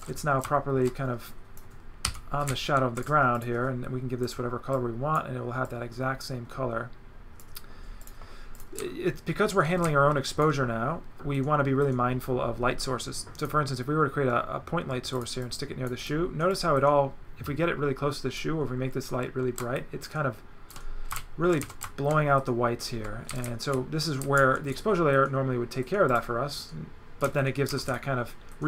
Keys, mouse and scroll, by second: 0.0 z, 0.4 click, 2.0 g, 2.4 right click, 3.3 click, 4.2 click, 4.7 click, 5.6 click, 8.0 click, 8.5 click, 8.7 right click, 13.4 click, 15.1 click, 16.1 right click, 16.6 click, 19.8 shift+click, 21.2 shift+right click, 21.7 right click, 26.1 click, 27.3 right click.